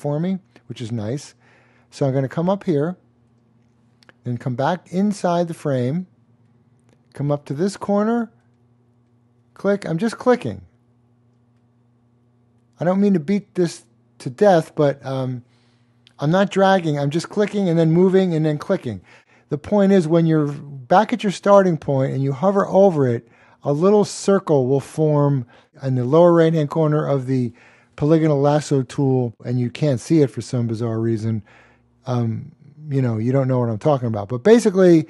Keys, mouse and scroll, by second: 3.3 click, 7.5 click, 10.5 click, 14.6 click.